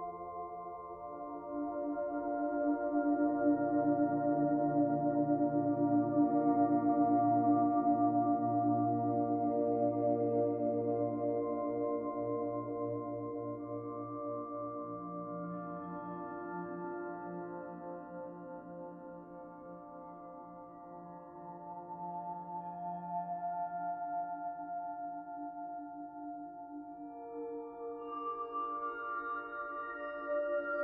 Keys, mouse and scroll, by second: 2.2-2.6 scroll down 3, 2.6 middle click, 3.5-3.8 scroll down 1, 3.8 middle click, 4.6-5.1 scroll down 2, 5.3 shift+middle click, 5.9 middle click, 6.7 shift+middle click.